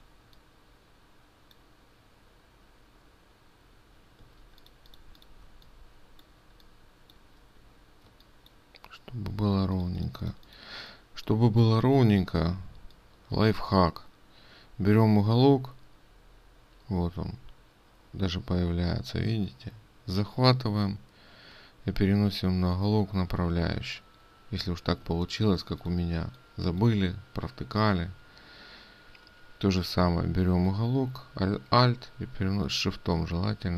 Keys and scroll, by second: 8.7 ctrl+space, 10.1 ctrl+space, 25.7 ctrl+space.